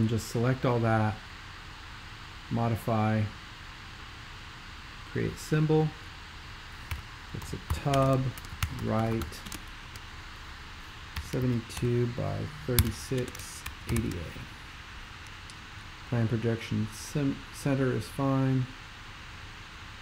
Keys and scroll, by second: 6.7-9.7 typing, 10.9-14.4 typing.